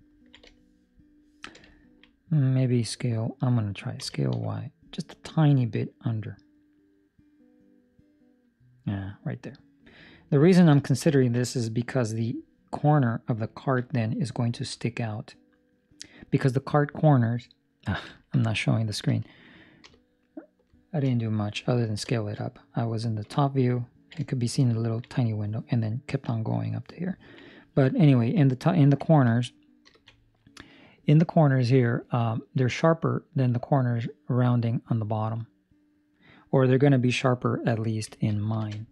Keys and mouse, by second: 21.8 ctrl+middle click, 22.0 shift+middle click, 22.3 shift+middle click, 23.1 KP_7, 23.8 ctrl+middle click, 24.1 shift+middle click, 24.7 ctrl+middle click, 27.1 ctrl+middle click, 27.4 middle click, 28.1 ctrl+middle click.